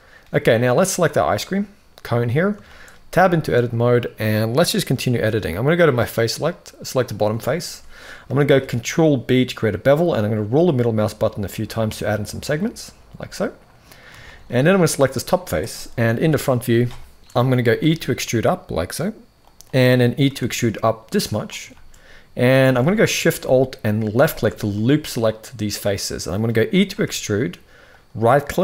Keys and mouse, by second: 0.6 click, 2.4 shift+middle click, 2.8 Tab, 3.4-4.4 middle drag, 5.8 click, 6.7 click, 7.1 shift+middle click, 8.2 ctrl+b, 12.8 middle click, 13.9 shift+middle click, 15.9 KP_1, 17.5 e, 20.0 e, 21.4 shift+middle click, 22.5 alt+a, 23.8 alt+shift+click, 24.4-26.1 middle drag, 26.6 e.